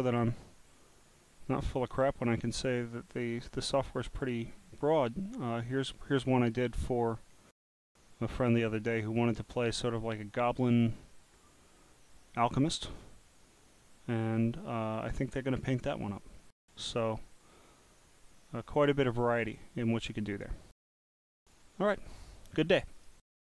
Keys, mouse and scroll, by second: 0.1 click, 1.2 click, 3.9 click, 4.0 click, 6.2-6.5 drag, 9.1 click, 10.6 click, 10.7 click, 12.6 click, 22.9 right click.